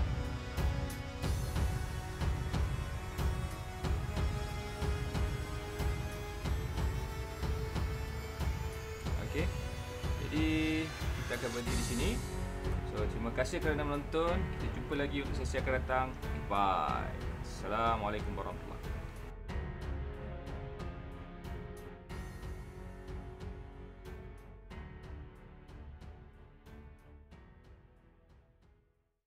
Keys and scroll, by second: 0.0 space, 2.4 super+space, 2.9 alt+super+space, 3.1 alt+super+space, 4.4 alt+super+space, 4.7 alt+super+space, 5.4 space, 6.0 super+space, 6.6 space, 7.5 super+space.